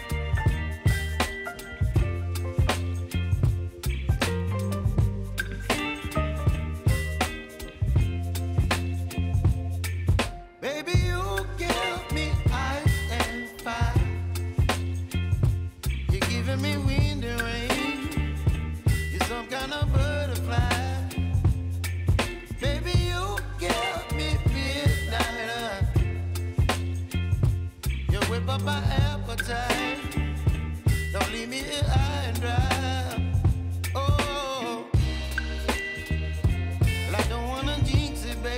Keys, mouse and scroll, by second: 0.2 space, 3.4 click, 6.1 ctrl+v, 7.2 click, 7.9 space, 10.3 shift+click, 10.9 ctrl+v, 11.7 space, 13.4 click, 13.9 space, 21.1 space, 22.0-23.5 drag, 24.8 right click, 25.7 click, 28.7 shift+click, 31.3 r, 32.0 click, 32.8 space, 33.7 click, 36.8 Return, 37.9 j.